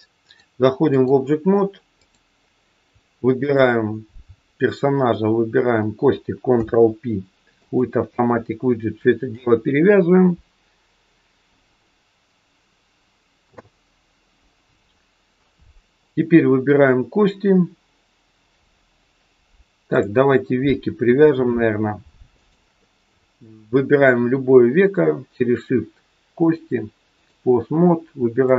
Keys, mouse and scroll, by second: 0.2 click, 1.9 click, 3.4 shift+click, 6.4 ctrl+p, 17.8-18.6 scroll up 1, 18.6-19.9 scroll up 3, 19.9 click, 20.9-21.9 scroll down 2, 22.3 shift+click, 26.3 click, 28.4 click.